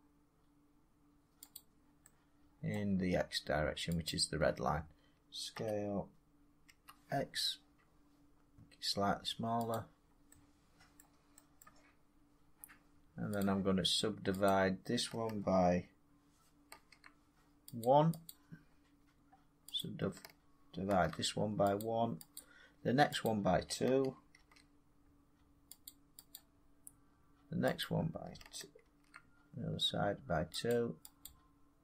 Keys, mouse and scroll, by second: 1.5 click, 2.7 middle click, 4.0 shift+click, 5.5 s, 6.6 x, 9.3 shift+click, 9.7-10.9 drag, 10.9 middle click, 11.5 middle click, 13.3 click, 14.4 click, 16.6 ctrl+r, 17.7 click, 18.2 click, 19.7 click, 20.8 ctrl+r, 21.7 click, 22.3 click, 23.2 click, 24.3 ctrl+r, 25.0 scroll, 25.8 click, 26.3 click, 27.7 click, 28.7 ctrl+r, 29.9 middle click, 30.6 click, 31.2 click.